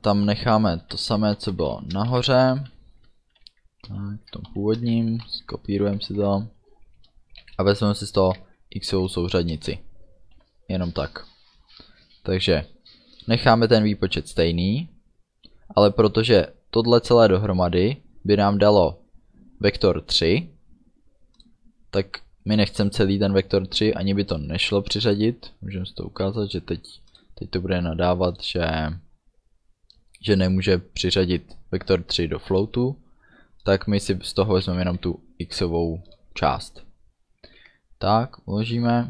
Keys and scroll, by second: 0.6 Up, 1.1 Right, 2.2 ctrl+shift+Right, 3.9 ctrl+shift+Left, 4.5 shift+Right, 5.3 ctrl+c, 5.8 Down, 6.1 ctrl+v, 9.6 Return, 10.4 ů, 26.3 BackSpace, 34.7 ., 34.9 x, 37.5 ctrl+s.